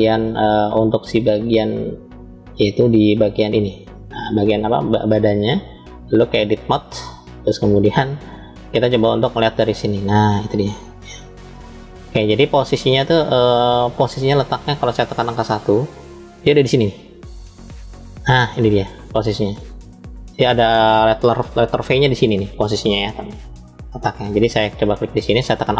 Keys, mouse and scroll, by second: 1.3-2.0 drag, 2.5 click, 5.8-7.0 drag, 8.1-10.8 middle drag, 11.5-12.5 shift+middle drag, 12.8 scroll up 2, 13.6-14.4 scroll up 1, 15.1 KP_1, 25.6 alt+click.